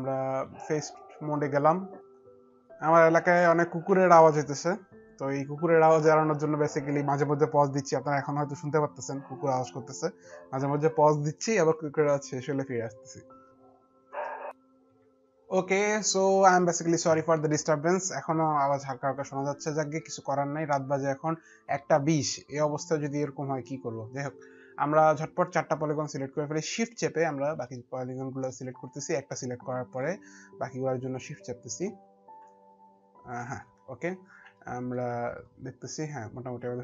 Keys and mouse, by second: 27.4 alt+middle click, 29.6 shift+click, 33.0 shift+click, 34.4 shift+click, 34.4 alt+middle click, 35.2 shift+click.